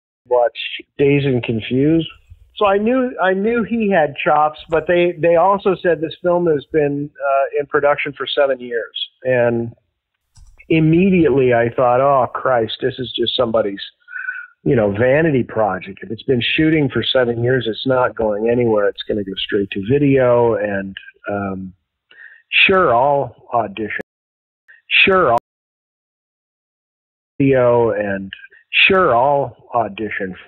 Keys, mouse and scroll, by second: 0.1 click, 0.1 space, 0.7 click, 1.6 click, 3.2 click, 4.2 ctrl+z, 6.4 ctrl+y, 7.6-9.0 drag, 9.3 click, 10.1 click, 10.8 click, 11.3 click, 12.4 click, 13.8 ctrl+a, 13.8 ctrl+s, 15.3-16.9 drag, 17.2 click, 18.0 click, 19.0 click, 20.1 click, 22.0-23.7 drag, 23.9 space, 24.4 ctrl+shift+Delete, 24.6 space, 25.3 space, 25.6 click, 26.4 click, 27.2 click, 27.3 space, 29.3 ctrl+s.